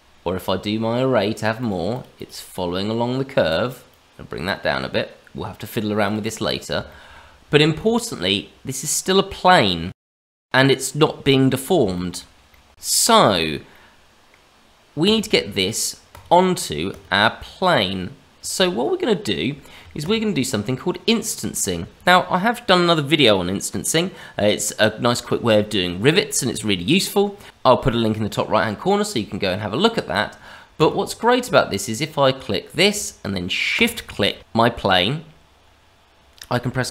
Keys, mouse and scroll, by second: 1.5 click, 1.9 click, 2.1 click, 3.9 click, 6.0 click, 6.2 click, 6.8 shift+middle click, 7.5 shift+middle click, 7.9-9.2 scroll up 2, 9.4 middle click, 11.4-11.8 scroll down 2, 11.9 shift+middle click, 12.5 middle click, 12.7 click, 13.7 middle click, 15.0 click, 16.0 click, 17.1 click, 17.3 middle click, 19.9 click, 20.5 middle click, 29.2-30.0 scroll up 2, 30.0 click, 30.7 click, 33.7 shift+click, 35.5 shift+middle click.